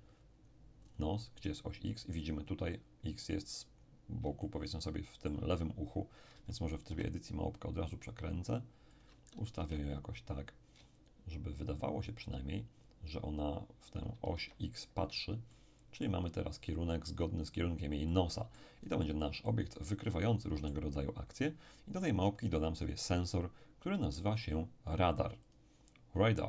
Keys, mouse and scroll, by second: 0.8-1.9 scroll up 2, 4.0-4.4 scroll down 3, 4.4-6.2 shift+middle drag, 6.3 shift+Tab, 6.9 shift+r, 9.0 ctrl+click, 9.6 ctrl+g, 13.9 shift+click, 14.4 shift+Tab, 15.5-16.5 middle drag, 16.5-17.5 scroll up 2, 18.1 middle click, 18.8-19.4 scroll down 2, 19.4-21.7 middle drag, 21.9-22.8 scroll up 1, 22.8 click, 25.5 click.